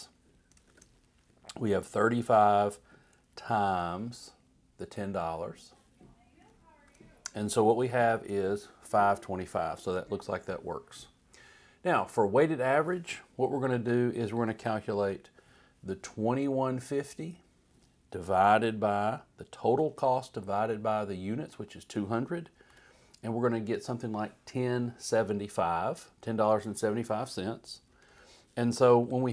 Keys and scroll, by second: 0.7-2.4 typing, 3.7 *, 6.8 shift+0, 7.8 shift+Return, 13.7 Right, 15.0 =, 19.7 /, 22.7 Return, 23.7 Up, 27.9 Left, 29.0 =.